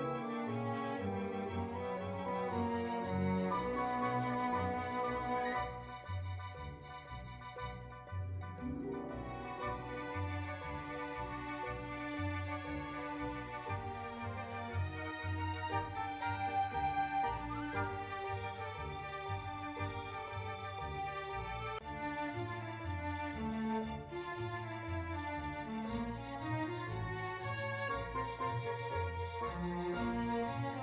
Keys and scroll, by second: 30.0 ctrl+b.